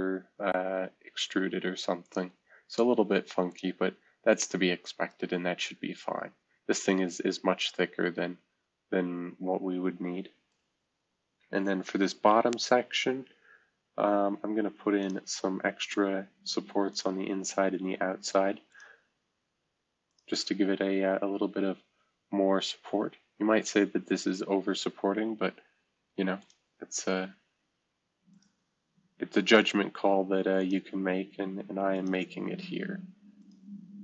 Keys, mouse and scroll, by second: 2.0 click, 3.5 click, 4.5-5.1 right drag, 6.8-13.4 right drag, 15.0 click, 16.9 click, 18.7 click, 20.1 click, 26.4 click, 28.3-29.4 drag, 30.6 click, 31.9-34.0 drag.